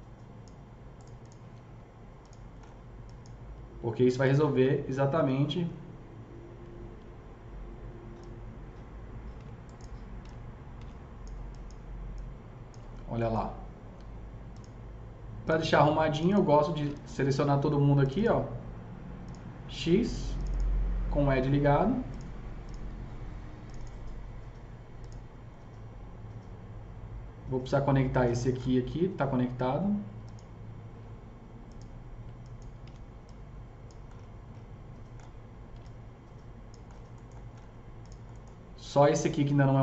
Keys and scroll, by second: 9.3 s, 10.6 s, 17.0 ctrl+z, 32.8 s, 35.7 s.